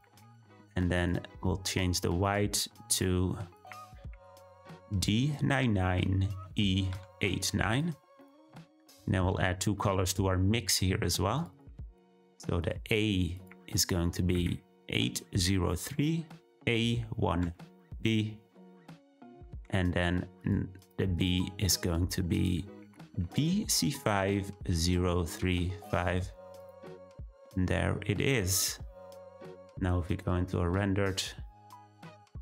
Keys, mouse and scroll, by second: 2.3-6.9 drag, 28.4-28.8 scroll down 2, 30.2 z.